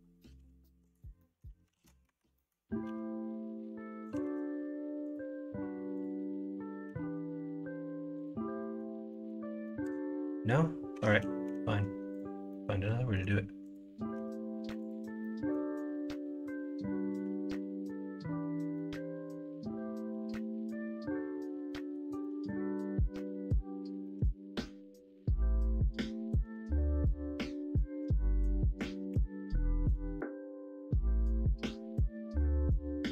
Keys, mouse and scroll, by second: 1.1 middle click, 1.7 ctrl+z, 2.0 Tab, 2.3 middle click, 2.8 g, 4.2 ctrl+z, 5.1-6.8 drag, 6.8 g, 8.6 scroll up 1, 8.7-9.0 scroll down 1, 9.0-9.8 scroll up 2, 9.8 middle click, 9.9-10.6 scroll down 1, 10.6-10.9 scroll down 1, 10.9 Tab, 11.4 x, 12.4 middle click, 13.1 middle click, 14.1 Tab, 15.2 middle click, 18.7-20.3 middle drag, 21.0 middle click, 21.6 middle click, 22.2 middle click, 24.0-25.7 middle drag, 29.1 shift+d, 31.9 middle click, 32.9 middle click.